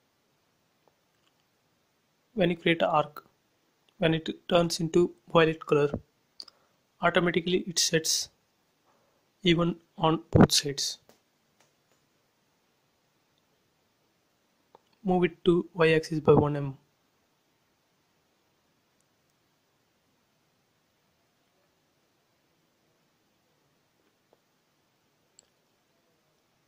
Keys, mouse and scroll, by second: 0.6 click, 3.4 click, 6.8 space, 8.7 shift+x, 8.9 middle click, 10.0 p, 10.3 click, 11.2-12.5 typing, 12.2 Return, 12.7 click, 14.0 m, 14.2 click, 15.5 Left, 15.9-17.3 typing, 16.9 Return, 17.5 click, 18.1 middle click, 18.9 scroll up 1, 19.2 f, 19.7 click, 20.6-22.5 typing, 21.5 Return, 22.3 scroll up 1, 23.6 click.